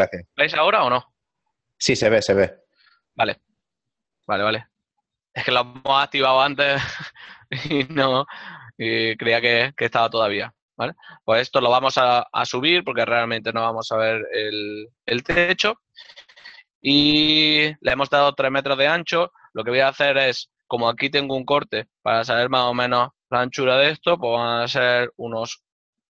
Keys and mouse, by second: 0.6 middle click, 7.1 middle click, 9.6 right click, 12.8 shift+middle click, 14.7 shift+middle click, 20.4 right click, 24.6 shift+middle click.